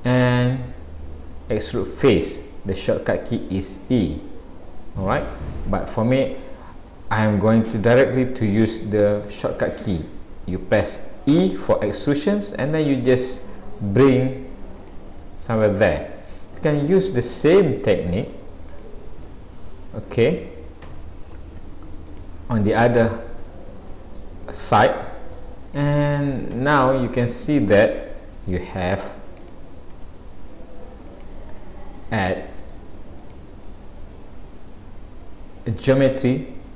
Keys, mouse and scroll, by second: 15.2-15.5 scroll down 1, 15.8 middle click, 15.8-16.8 scroll down 1, 17.1 middle click, 18.7 click, 19.3 middle click, 20.9 e, 22.6 middle click, 24.5 middle click, 25.8 click, 26.6 e, 28.3 middle click, 29.4 click, 30.0 e, 31.6-32.1 scroll down 4, 32.0 middle click, 33.3 click, 33.6 middle click, 36.6-36.7 scroll up 2.